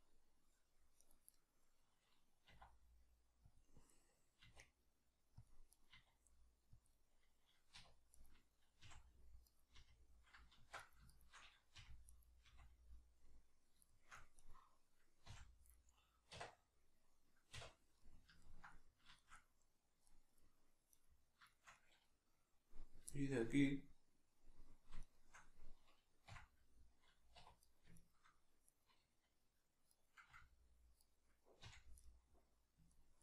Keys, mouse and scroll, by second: 1.0 right click, 1.3-3.9 middle drag, 2.5 e, 3.6 click, 3.9 right click, 4.5 e, 5.5 click, 5.7 right click, 5.9 e, 6.9 click, 7.7 2, 8.1 right click, 8.8 f, 9.5 right click, 9.7 f, 10.8 right click, 11.1 shift+right click, 11.8 f, 12.1 right click, 12.5 f, 13.9 shift+middle click, 14.4 right click, 15.3 f, 15.7-20.9 middle drag, 16.3 1, 17.5 \, 20.9 right click, 21.5-25.0 shift+middle drag, 25.0 shift+right click, 26.3 f, 27.7 right click, 28.0 shift+right click, 28.7 right click, 29.9 right click, 30.3 f, 31.0 right click, 31.7 f, 32.1 middle click.